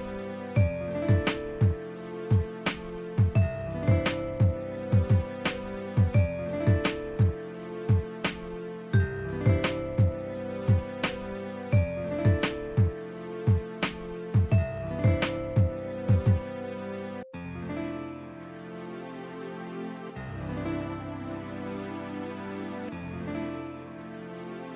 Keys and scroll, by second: 2.7 ctrl+z, 5.5 scroll down 1, 6.0 scroll up 1, 10.3 scroll down 1, 10.6 scroll up 1, 11.1 ctrl+z, 11.9 ctrl+z, 12.3 scroll down 1, 13.3 scroll up 1, 13.9 scroll down 1, 14.4 scroll up 1, 16.7 ctrl+z, 17.0 ], 17.7 ctrl+z, 18.0 scroll up 1, 18.6 ctrl+z.